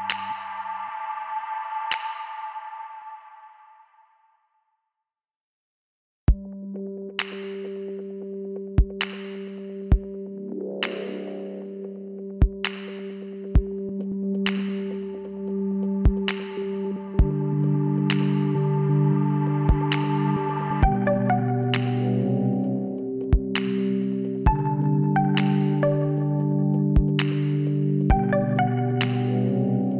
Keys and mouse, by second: 0.4 e, 1.6-3.4 drag, 4.9 f, 6.0 z, 6.5 right click, 7.5 l, 8.3 s, 13.5-16.4 drag, 15.8 e, 19.3 KP_1, 20.1-22.4 drag, 21.7 e, 27.7-29.4 drag, 29.6 s.